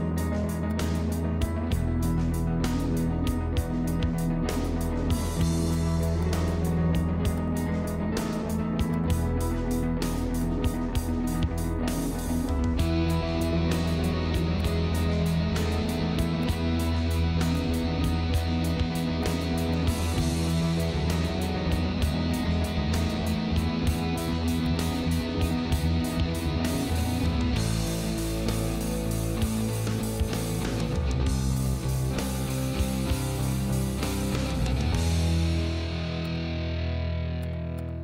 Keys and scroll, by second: 25.6 ctrl+z.